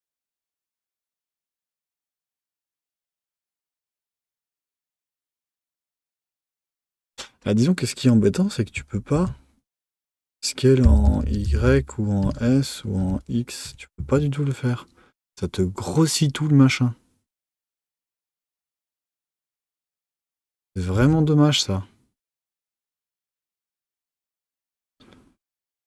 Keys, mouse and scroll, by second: 2.6 Tab, 4.8 Tab, 6.9 click, 9.1 alt+s, 17.1 middle click, 17.5 Tab, 20.4 z, 23.9 Tab, 24.5 click.